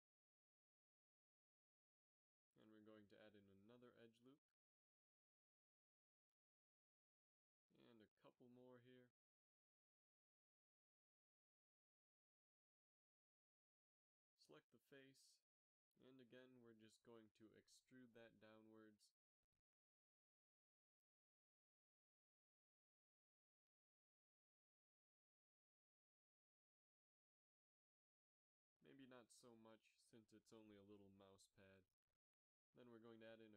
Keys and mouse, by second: 0.4 ctrl+r, 4.7 right click, 5.3 g, 7.3 z, 8.0 z, 8.9 ctrl+r, 10.9 s, 14.1 z, 14.6 ctrl+Tab, 15.4 right click, 16.6 KP_3, 17.2 z, 18.7 e, 23.0 KP_7, 24.4 KP_3, 25.3 g, 29.0 g, 30.9 KP_7, 31.2 z, 32.5 ctrl+r.